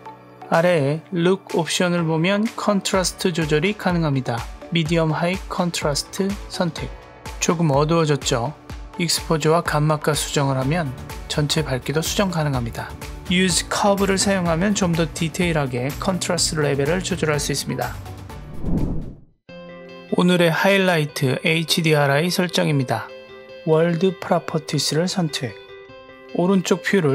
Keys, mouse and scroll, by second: 1.8-5.4 drag, 10.6 click, 12.0 click, 23.9 click, 25.7 click.